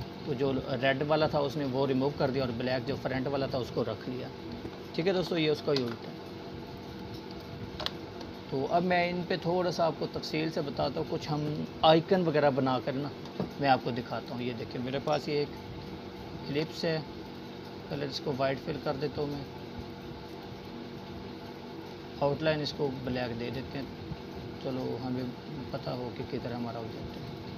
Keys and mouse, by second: 1.5 ctrl+z, 3.2-4.1 click, 4.3 Delete, 5.7-7.0 drag, 10.7 click, 12.2-13.1 alt+shift+drag.